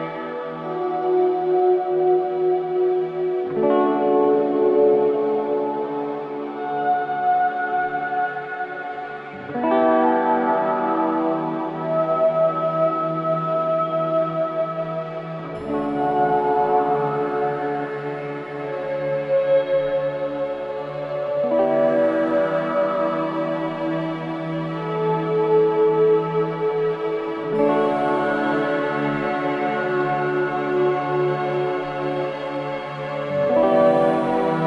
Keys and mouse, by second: 0.0-10.1 typing, 0.3 click, 2.2 click, 4.6-5.9 drag, 8.8 click, 9.4 click, 12.8 i, 13.7 click, 14.9 click, 16.9 i, 17.5 click, 18.7-19.8 drag, 20.0-22.8 typing, 20.6 Return, 21.4 click, 23.4 click, 23.7 click, 24.0 space, 25.6 space, 27.1 click, 30.0 click, 31.0 ctrl+alt+click, 32.6-34.6 drag, 34.0-34.6 typing.